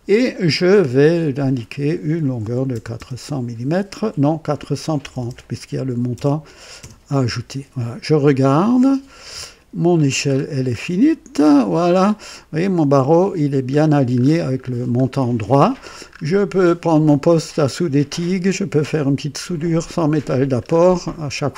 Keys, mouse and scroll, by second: 1.2 click, 2.4-3.0 typing, 5.0 BackSpace, 5.2 BackSpace, 5.9 KP_3, 6.1 KP_0, 6.8 Return, 8.3-10.1 drag, 10.3-11.0 scroll up 3, 11.5 right click, 12.0 scroll up 2, 13.9-14.8 scroll down 3, 16.0-16.3 scroll up 1, 16.7 middle click, 20.6-20.9 scroll down 2.